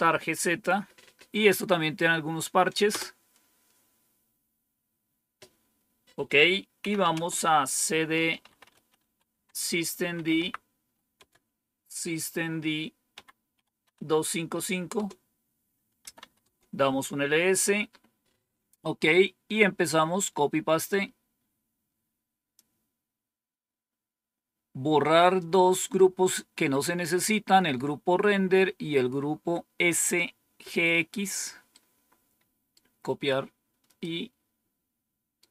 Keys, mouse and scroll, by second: 2.8 Return, 6.5-11.1 typing, 13.7-15.9 typing, 16.3 Tab, 20.8-22.5 drag, 31.6-32.6 right drag, 33.9-35.3 right drag.